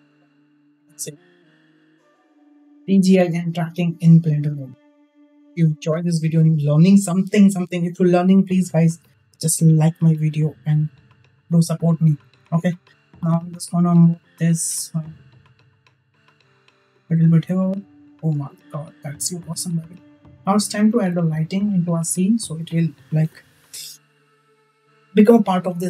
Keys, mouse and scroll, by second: 5.6 space, 13.0 click, 15.4 click, 16.6 click, 17.5 space, 19.6 space, 20.9 alt+h.